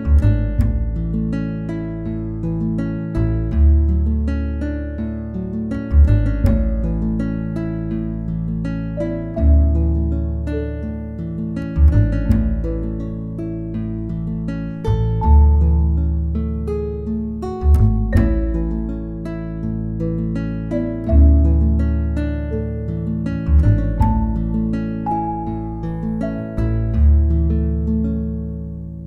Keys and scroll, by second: 1.6-3.1 typing, 8.5 space, 9.3 space, 16.2 space, 17.2 l, 20.4 space, 21.1 space, 26.4 space, 28.1 space.